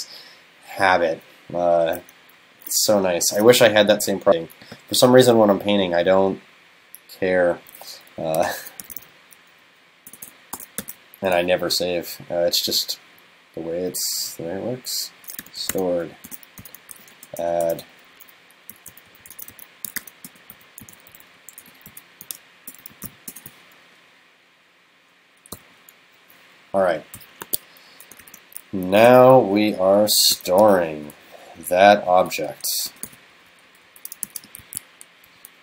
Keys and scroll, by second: 27.2 super+Left, 28.3 shift+super+Right, 29.1 super+c, 30.2 super+Right, 30.6 super+v, 33.1 super+v, 34.3 super+s.